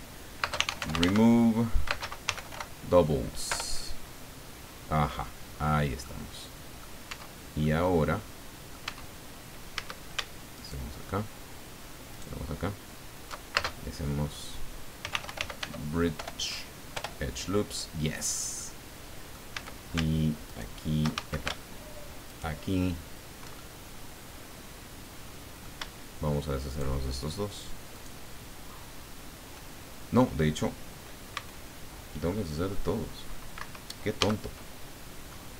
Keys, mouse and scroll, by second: 0.4-2.5 typing, 3.5 Return, 6.0 middle click, 7.0 Tab, 7.6 click, 8.3 middle click, 8.4 right click, 8.8 Tab, 9.2-9.5 scroll up 1, 9.7 a, 10.5 alt+shift+right click, 12.1 alt+shift+right click, 13.5 alt+shift+space, 15.0-16.1 typing, 16.9 Return, 18.6 click, 19.5 a, 20.5 alt+shift+right click, 21.1 alt+shift+a, 22.2 alt+shift+right click, 23.5-26.0 alt+shift+middle drag, 26.6 shift+right click, 27.9 shift+right click, 31.3 c, 32.3-33.7 drag, 33.5 Escape, 34.2 a, 34.8-35.1 scroll down 2, 35.3-35.5 drag.